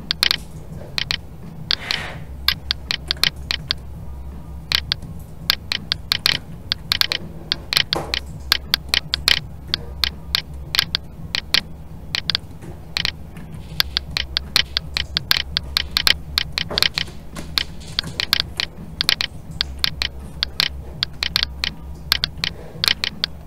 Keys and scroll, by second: 13.3 alt+a.